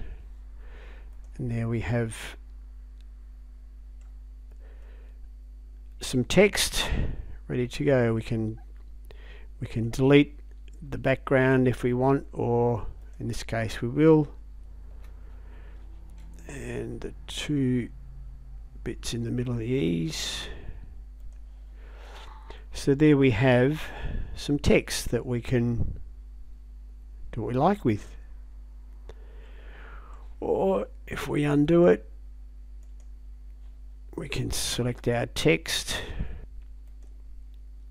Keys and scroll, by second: 14.9 Delete.